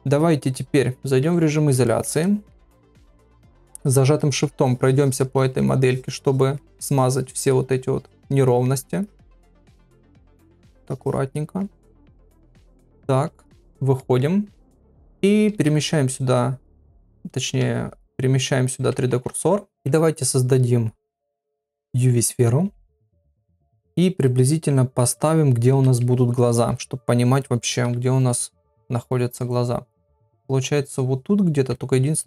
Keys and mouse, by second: 1.2 KP_Divide, 1.9 ctrl+middle click, 2.2 middle click, 2.5-3.0 ], 3.6 shift+click, 4.2 middle click, 4.7 shift+click, 5.4 middle click, 5.9 shift+click, 6.6 middle click, 7.0 shift+click, 7.5 middle click, 8.0 shift+click, 8.5 middle click, 9.0 shift+click, 9.6 middle click, 10.1 shift+click, 10.4 middle click, 10.9 shift+click, 11.4 middle click, 11.9 shift+click, 12.2 middle click, 12.8 ctrl+Tab, 14.0 middle click, 14.7 KP_Divide, 15.5 ctrl+Tab, 17.4 ctrl+Tab, 19.1 shift+s, 19.7 shift+a, 22.7 s, 24.2 click, 25.7 KP_7, 26.7 g, 28.6 KP_1, 31.7 KP_3.